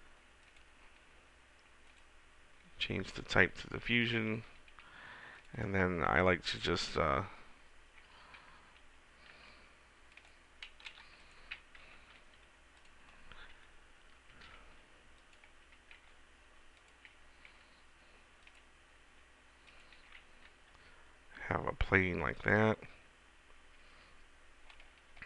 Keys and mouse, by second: 0.6-2.2 middle drag, 2.2 click, 4.4 shift+a, 7.3 click, 9.5 g, 11.1 Delete, 12.1 shift+s, 14.4 shift+a, 16.1 s, 17.0-18.2 drag, 17.6 s, 19.2 s, 20.2 g, 23.9 right click.